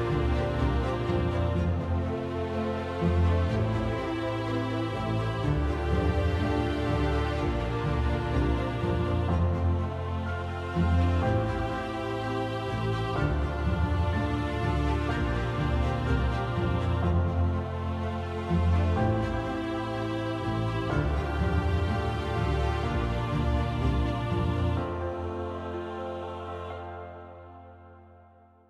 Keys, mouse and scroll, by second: 0.1 click, 1.9 click, 2.3 alt+click, 3.2 Page_Down, 3.7 Page_Down, 4.0 Page_Down, 4.3 Page_Down, 5.1 click, 5.6 Page_Down, 5.8 Page_Down, 6.1 Page_Down, 6.5 Page_Down, 8.6 click, 9.4 click, 10.3 ctrl+d, 11.3 shift+click, 12.7 ctrl+-, 13.7 click, 14.5 ctrl+d, 15.2 shift+click, 16.2 ctrl+-, 17.3 click, 18.5 -, 19.7-20.3 scroll, 22.9 -, 23.3 -, 23.7 -, 25.2-28.4 scroll.